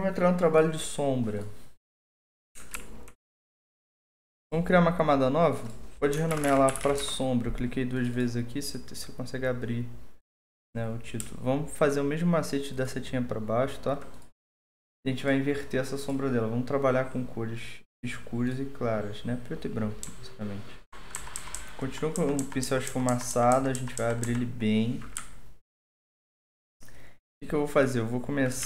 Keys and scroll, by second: 2.7 alt+2, 6.0-7.3 typing, 9.6 Return, 20.2-24.2 typing, 28.3 typing, 28.6 ctrl+z.